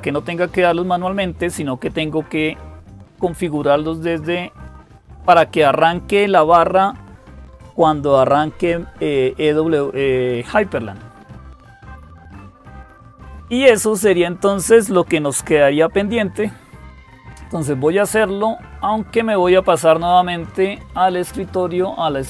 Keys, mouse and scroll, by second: 22.1 click.